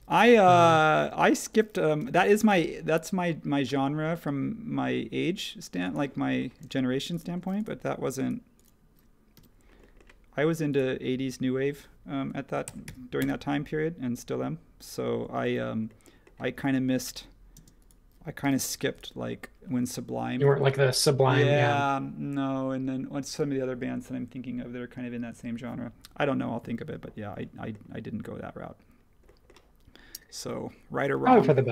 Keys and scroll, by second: 1.0 space, 2.0 |, 6.6 space, 9.3 m, 12.4-13.3 typing, 17.0 super+z, 18.4 m.